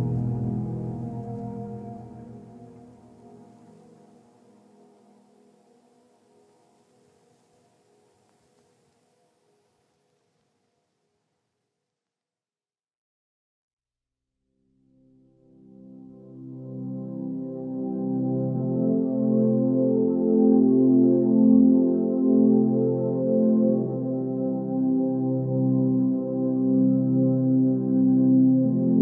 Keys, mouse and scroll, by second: 10.3 g, 13.0 b, 14.2 x, 17.4 ctrl+space.